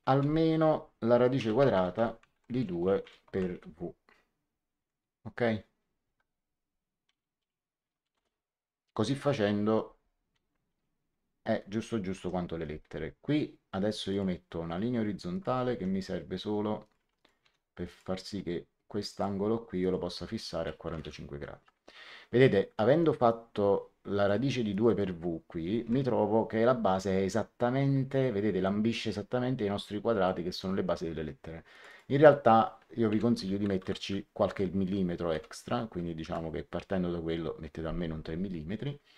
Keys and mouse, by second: 1.0-3.9 typing, 6.0 Tab, 8.0 Return, 12.1 l, 14.0 click, 15.2 click, 15.6 Escape, 16.7 click, 16.9 x, 17.1 click, 17.3 d, 17.8 click, 19.0 click, 20.8 KP_4, 20.8 KP_4, 20.9 Return, 20.9 KP_Enter, 22.8 Escape, 23.2 click, 24.6 click, 25.7 Escape, 28.2 middle click, 30.2 middle click, 31.6 click, 33.0 End, 33.7 KP_Add, 35.2 KP_3, 36.2 Return, 36.2 KP_Enter.